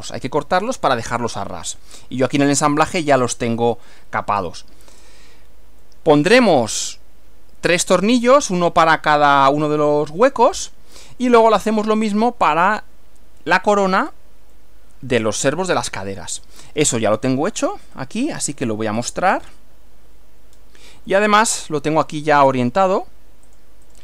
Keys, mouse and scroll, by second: 1.7-2.0 scroll down 2, 3.5 middle click, 4.5 shift+click, 5.9 click, 6.7-8.1 drag, 10.5-11.5 drag, 14.0 scroll down 1, 14.5 click, 17.7 click, 18.0 right click, 19.1 click, 20.5 scroll down 1, 21.1-22.1 middle drag, 22.4-23.1 middle drag, 23.5 click, 23.9 right click.